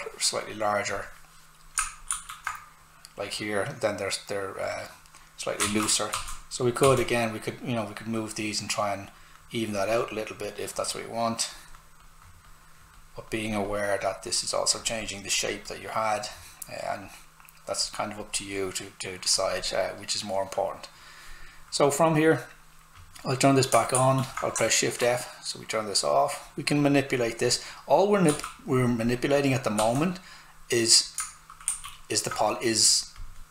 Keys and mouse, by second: 0.9 click, 2.1 shift+f, 5.6 alt+f, 5.9 w, 6.1 s, 6.5 click, 6.8 s, 6.9 click, 23.0 click, 24.0 shift+f, 24.7 alt+right click, 26.0 click, 28.3 s, 28.7 click, 29.8 s, 29.9 click, 31.7 shift+f, 33.2 click.